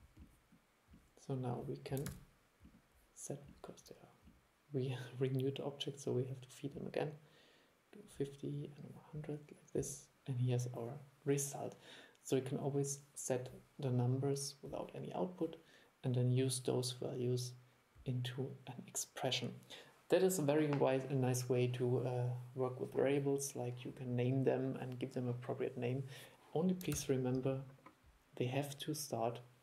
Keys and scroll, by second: 2.2 super+e, 27.1 super+e.